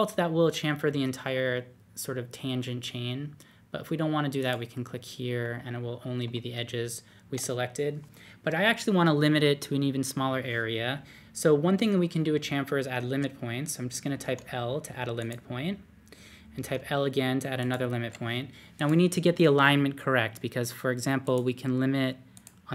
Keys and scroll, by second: 14.2 l, 16.3-17.1 typing.